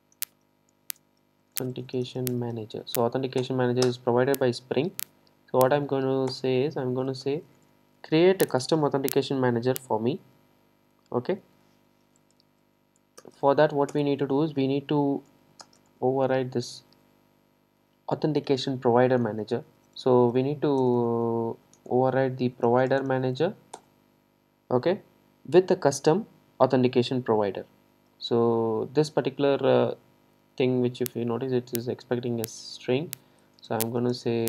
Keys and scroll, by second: 3.5 Return, 14.0 Return, 23.9 Return.